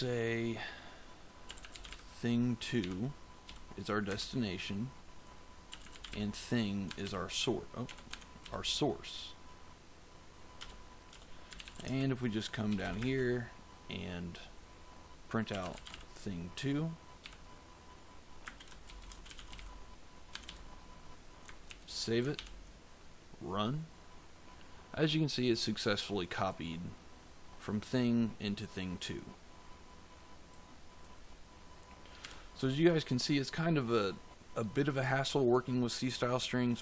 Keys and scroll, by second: 1.1-4.0 typing, 5.4-8.3 typing, 6.8 Tab, 8.0 Tab, 10.5 Return, 11.1-12.9 typing, 15.2-17.1 typing, 18.3-20.4 typing, 20.2 Tab, 21.6 ctrl+s, 22.3 ctrl+F5, 32.1 f.